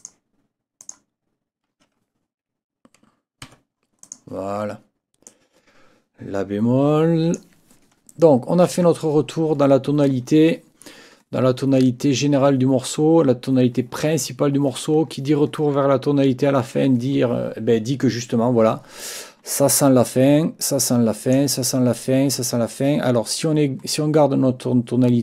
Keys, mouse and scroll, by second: 0.0 click, 0.8 click, 3.4 F8, 4.0 click, 5.3-7.5 drag, 20.1-21.5 drag.